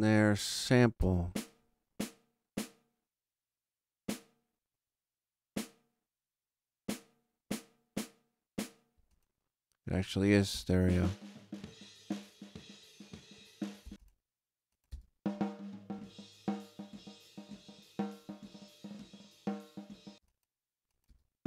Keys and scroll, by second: 0.9 space, 8.9 space, 10.5 space, 13.8 space, 20.0 space.